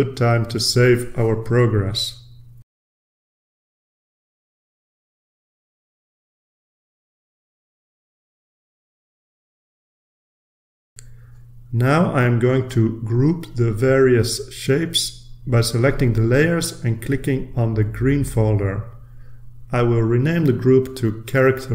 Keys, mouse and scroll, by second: 1.1-1.8 drag, 2.4 click, 5.1 5, 7.9 click, 8.9 click, 10.9 ctrl+r, 15.3-15.9 scroll up 2, 15.9 middle click, 16.2-16.9 drag, 17.1 shift+click, 19.4 click, 20.8 click.